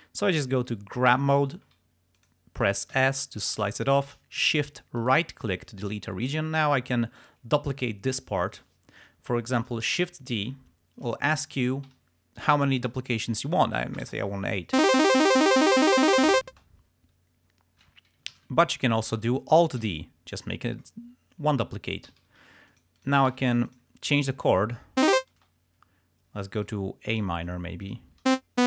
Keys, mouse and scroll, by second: 1.2 g, 2.3 click, 3.1 s, 3.5 shift+click, 5.1 shift+right click, 6.3 click, 9.9 shift+d, 13.8 7, 14.1 Return, 14.9 space, 16.6 space, 18.4 ctrl+z, 19.9 alt+d, 22.1 alt+d, 22.8 alt+click, 23.5 alt+d, 23.8 alt+click, 24.3 alt+click, 24.7 ctrl+scroll up 2, 25.1 ctrl+space, 26.7 click, 27.9 click, 28.2 e, 28.4 click.